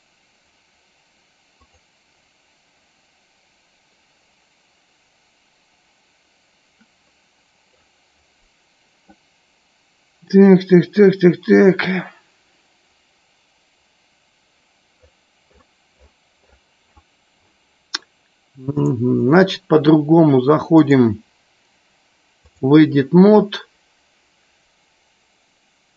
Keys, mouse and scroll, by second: 19.3 click, 21.3-22.8 drag.